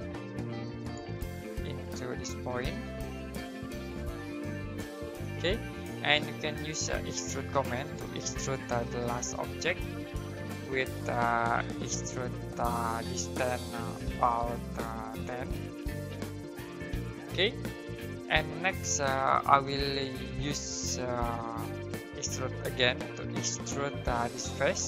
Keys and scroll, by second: 6.4-7.3 typing, 8.4-9.4 typing, 15.3-16.9 typing, 21.9-23.3 typing.